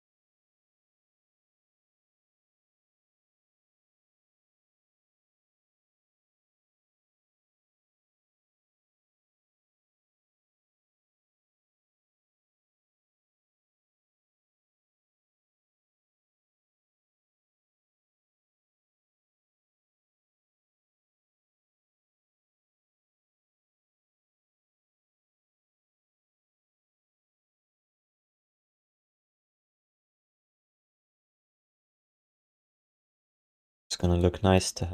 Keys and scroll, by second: 23.1 q, 28.9 q, 33.2 ctrl+s.